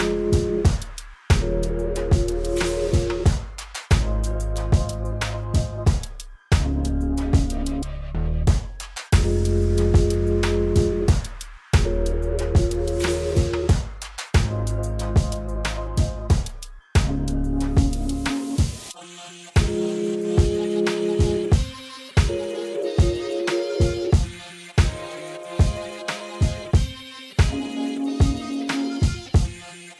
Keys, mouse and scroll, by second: 0.7 click, 2.4-6.7 drag, 8.7-10.9 drag, 13.6 click, 16.1-18.3 drag, 20.4 click, 26.1 click.